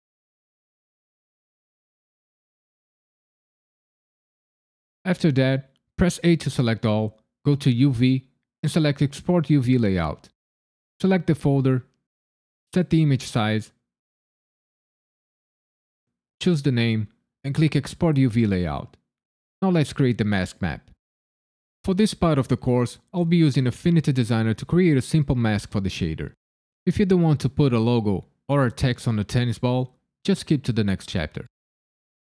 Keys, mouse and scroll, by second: 1.5 click, 2.2 l, 2.9 g, 3.3 click, 3.8 click, 6.2 a, 7.7 click.